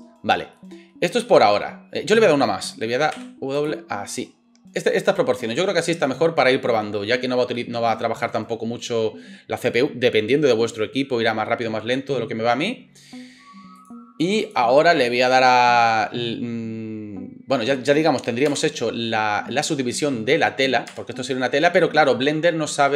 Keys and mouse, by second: 3.1 w, 13.8-22.9 drag, 18.5 Tab, 20.9 Tab.